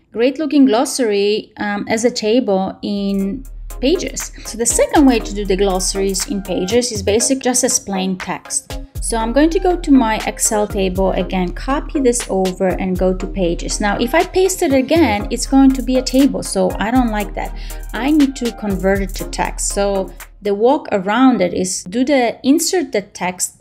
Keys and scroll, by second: 11.4 shift+super+c.